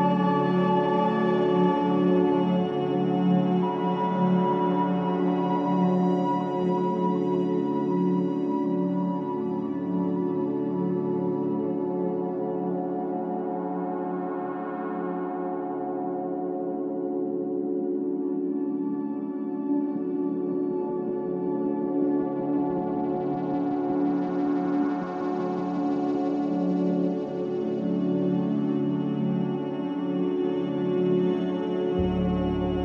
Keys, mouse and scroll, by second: 1.1 click, 1.7-3.7 scroll up 6, 3.7-8.3 right drag, 8.3 s, 14.4-20.3 drag, 21.9 click, 24.1 shift+a, 29.1-32.8 drag.